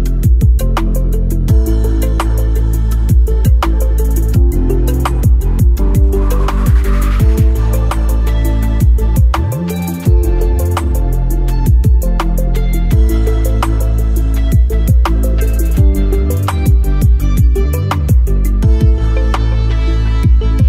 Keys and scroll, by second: 0.0-2.2 typing, 2.5 Return, 3.2-5.5 typing, 15.9 F3, 16.4 Escape, 16.9 F3, 17.3 Escape, 18.1 shift+F2, 18.5 Escape.